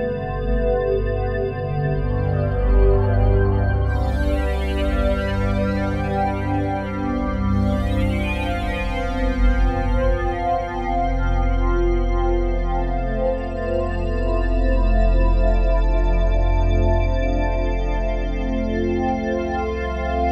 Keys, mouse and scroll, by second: 1.5-7.0 drag, 7.0 r, 7.3 y, 7.7 9, 7.8 0, 8.0 Return, 9.3-10.6 typing, 12.2 Escape, 13.1-14.6 typing, 14.6 Return, 15.9-18.4 ctrl+alt+drag, 16.8 0, 18.5 s.